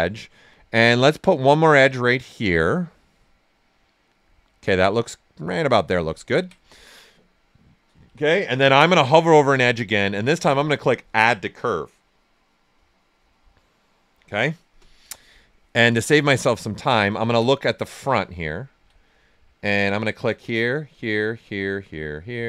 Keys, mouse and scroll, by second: 0.5 ctrl+right click, 1.2-6.2 drag, 6.2 ctrl+right click, 8.0 x, 9.5 space, 14.4 space, 15.0 right click, 16.2 ctrl+right click, 19.8 click.